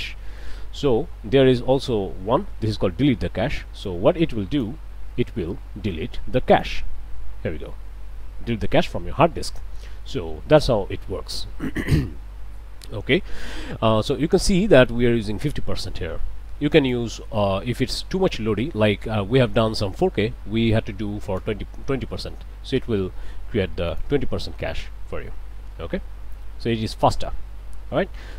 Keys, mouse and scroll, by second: 3.9 click, 6.6 click, 9.6-10.8 drag, 11.6-12.2 scroll up 2, 16.8 click, 20.8 2, 21.0 0, 21.4 Return, 23.9 click, 27.6 Escape.